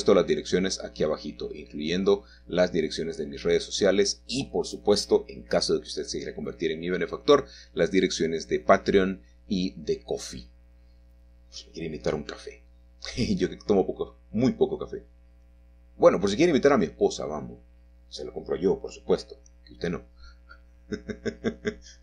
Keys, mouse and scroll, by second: 3.0 click, 4.0 click, 6.0 1, 7.7 c, 8.3 click, 9.0-10.2 drag, 11.0-12.2 drag, 13.2-14.3 drag, 15.1-16.8 drag, 18.1-20.3 drag, 20.4-21.8 drag.